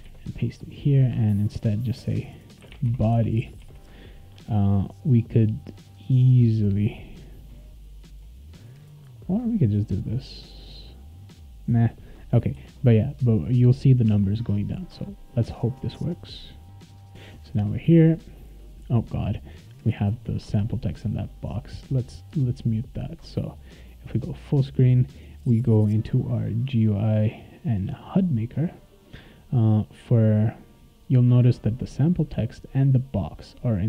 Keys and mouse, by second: 0.0 ctrl+v, 1.3 click, 1.4 click, 2.4-3.6 typing, 9.2-11.7 drag, 12.2 click, 12.5 ctrl+s, 14.8 click, 17.5 click, 21.3 click, 23.3 click, 24.1 click, 26.4 click, 26.8 click, 27.6 click, 28.1 click, 30.7 click, 31.9 click, 33.2 click.